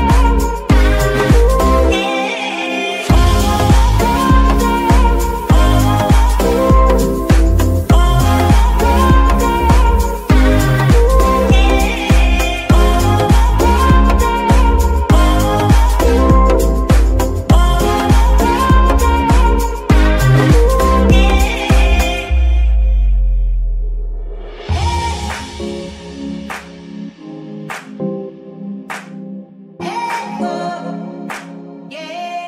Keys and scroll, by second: 9.7 z, 10.2 Tab, 19.4 g, 23.4 g, 27.2 g, 28.7 Escape, 30.7 g.